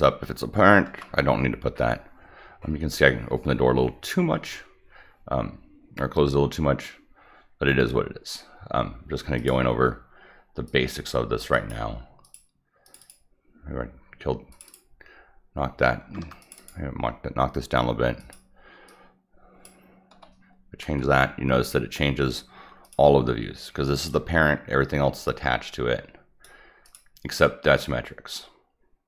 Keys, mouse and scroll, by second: 9.3 click, 10.6-11.3 drag, 11.5 click, 12.2 click, 12.8 click, 13.0 click, 14.5 click, 14.6 click, 16.0 Escape, 16.4 click, 16.5 click, 18.2 click, 18.8 click, 22.8 click, 24.0-26.4 drag, 26.8 click, 27.8-29.0 drag.